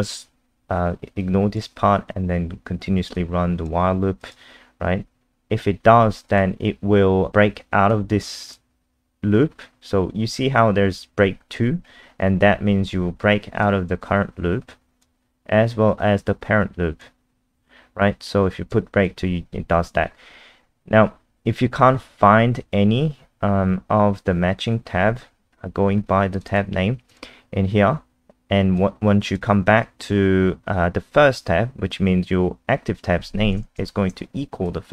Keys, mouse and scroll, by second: 1.2 click, 25.8-26.3 scroll up 1, 26.3 click, 26.5 click, 27.1 click, 33.8 shift+click, 34.7 click.